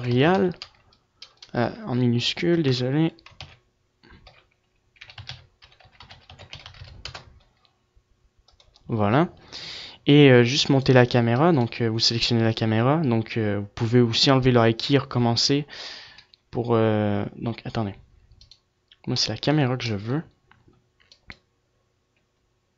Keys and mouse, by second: 12.4 click, 20.6 g.